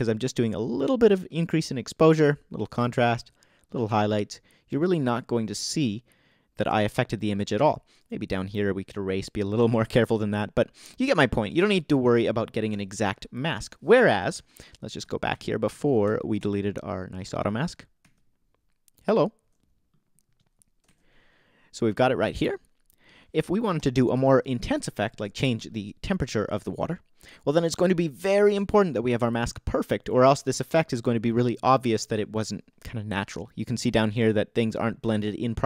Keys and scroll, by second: 21.9 super+z.